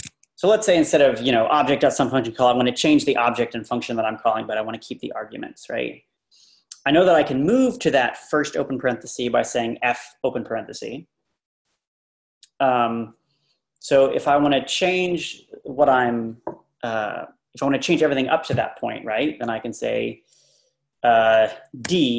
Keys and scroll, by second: 0.7 Page_Up, 1.4 Page_Down, 21.9 d.